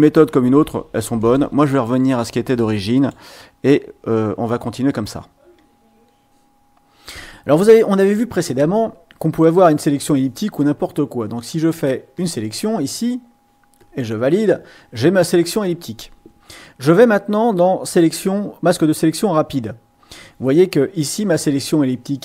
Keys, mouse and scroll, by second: 1.2 right click, 2.9 click, 9.5 click, 10.7-11.9 drag, 12.1 click, 13.7 click, 18.9 click.